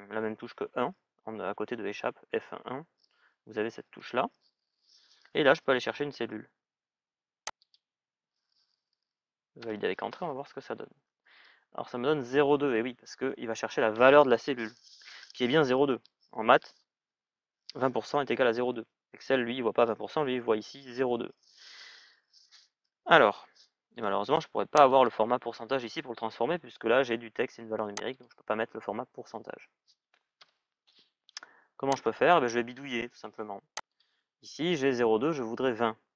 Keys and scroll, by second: 9.3 Return, 30.2 Return.